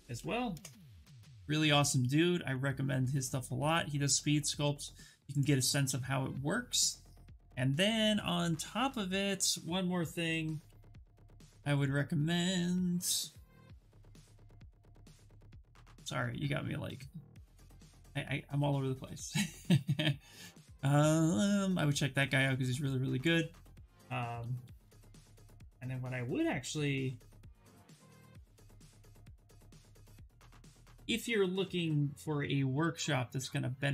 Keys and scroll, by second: 0.2 Return, 9.7-10.9 typing, 11.5 Return, 24.2-28.0 typing, 30.2 BackSpace, 31.5 3, 32.0 shift+d, 32.4 space, 32.8 w.